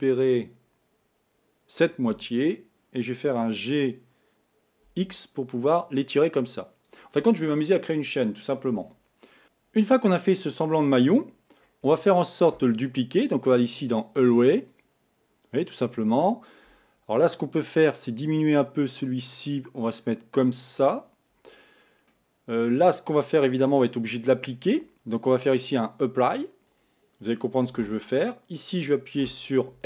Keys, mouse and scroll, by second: 3.8 g, 10.8-11.4 scroll down 2, 11.4-12.0 scroll down 2, 12.0-13.8 shift+middle drag, 13.8-16.9 drag, 18.4-21.2 drag, 22.2-25.2 middle drag, 25.6 click, 26.7 click, 27.7 Tab, 29.2 a, 29.7 l.